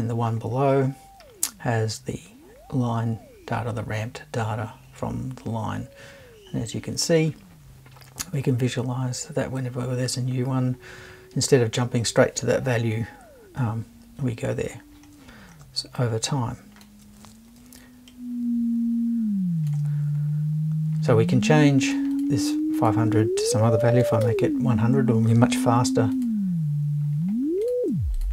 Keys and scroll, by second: 24.0 typing.